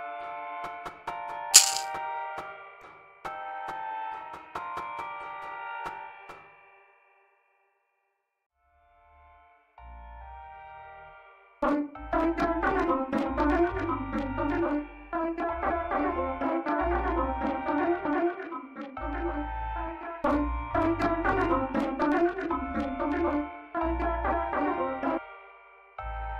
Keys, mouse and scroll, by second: 8.8 click, 11.4 click, 25.1 space, 26.2 click.